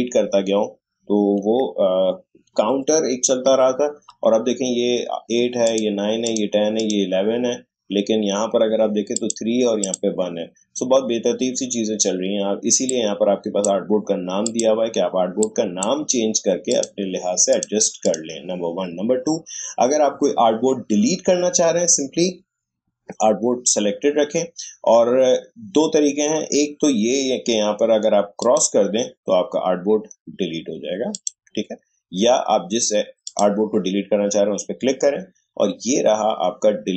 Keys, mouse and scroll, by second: 5.6 click, 9.1 click, 12.9-16.7 drag, 28.4 click, 31.1 click.